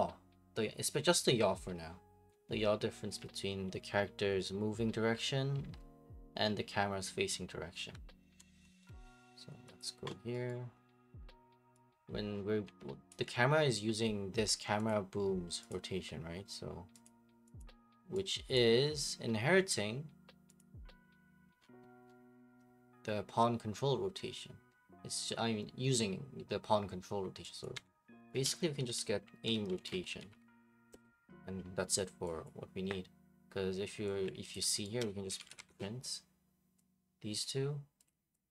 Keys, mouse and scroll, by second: 3.2-8.3 typing, 8.8 Escape, 9.8 click, 10.5 right click, 12.7 right click, 13.1 ctrl+click, 14.9 click, 15.7 click, 17.0 click, 17.6 click, 18.5 click, 20.6 click, 21.6-22.1 scroll, 27.6 click, 27.7 Delete, 28.3 right click, 28.8-30.9 typing, 32.5 click, 34.5 ctrl+click, 34.8 right click, 35.1-36.1 typing, 37.4 click, 38.0 click.